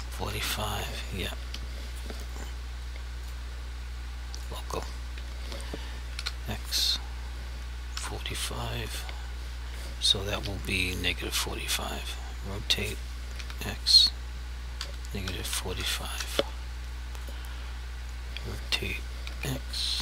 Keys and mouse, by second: 0.0 typing, 1.4 Escape, 3.2 click, 5.1 r, 6.2 x, 8.0 typing, 10.4 Escape, 11.7 r, 13.4 x, 14.8-15.5 typing, 16.1 Return, 17.2 click, 18.0 r, 19.3 x.